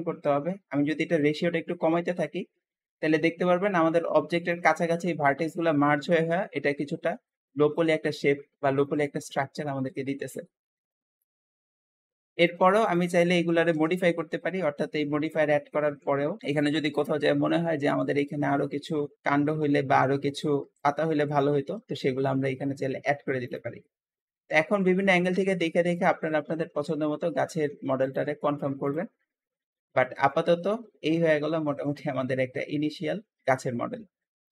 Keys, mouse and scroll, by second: 5.2-11.0 middle drag, 11.0 shift+click, 11.4-12.7 shift+middle drag, 12.7 shift+click, 13.6 KP_1, 13.6 1, 14.6 Tab, 16.1 KP_7, 16.4 click, 17.2 l, 17.6 KP_1, 17.7 1, 18.7-20.2 middle drag, 20.2-20.6 scroll up 1, 20.6 shift+d, 21.8 KP_7, 22.6 g, 23.7 scroll down 1, 24.0-25.3 middle drag, 25.3 r, 26.1-27.4 shift+middle drag, 27.4 g, 28.4 Tab, 28.8 click, 29.1-31.4 middle drag, 31.4 scroll down 2, 31.7-34.5 shift+middle drag.